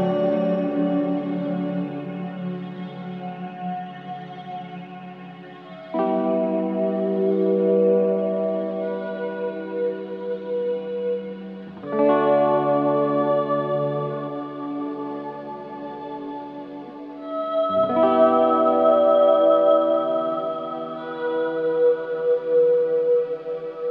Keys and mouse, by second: 0.2 typing, 1.3 click, 1.8 click, 3.3-4.3 shift+drag, 4.6 typing, 6.6 click, 7.3-12.7 alt+drag, 13.5-14.0 typing, 14.9 Escape, 16.0 click, 16.8-17.5 typing, 18.3-21.9 drag, 21.8 typing, 23.0 typing.